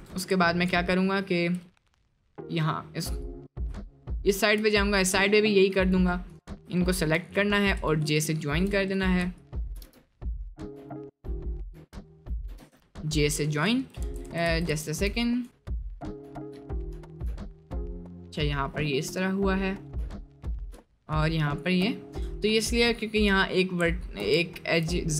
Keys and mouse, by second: 0.4 shift+middle click, 2.0 middle click, 3.9 shift+middle click, 6.2 shift+click, 7.2 j, 7.7 click, 8.2 shift+click, 9.0 click, 9.9 j, 11.5 click, 12.5 j, 14.0 ctrl+z, 15.6 shift+click, 16.7 shift+click, 20.1 shift+click, 21.5 shift+click, 22.3 shift+middle click, 23.9 shift+middle click, 24.5 shift+middle click.